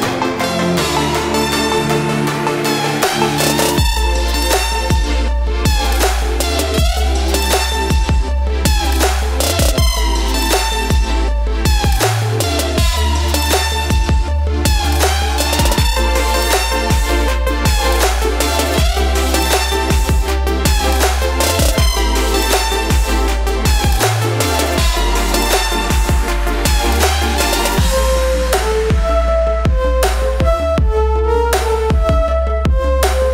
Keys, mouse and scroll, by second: 1.5 click, 5.5 typing, 7.5 click, 8.9 1, 12.6 click, 14.7 ctrl+space, 14.8 ctrl+click, 15.1 ctrl+space, 15.6 click, 16.4 right click, 18.6 ctrl+space, 18.7 ctrl+click, 18.9 ctrl+space, 20.9 click, 26.0 typing, 29.6 typing, 31.9 typing.